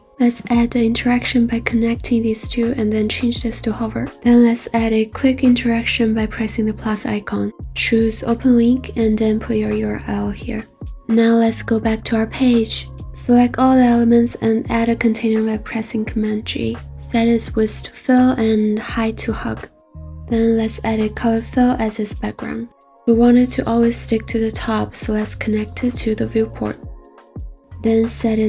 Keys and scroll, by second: 15.1 super+g, 21.3 f, 23.9 typing, 26.6 0, 26.8 Return.